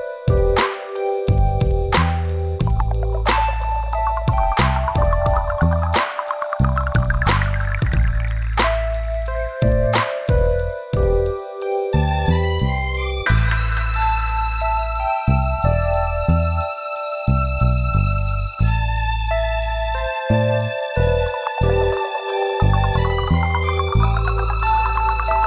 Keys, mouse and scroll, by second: 12.5 click, 12.7 click, 12.8 click, 13.0 click, 13.4 click, 13.7 click, 14.2 middle click, 17.7 middle click, 21.3 click, 21.3 click, 21.7 middle click.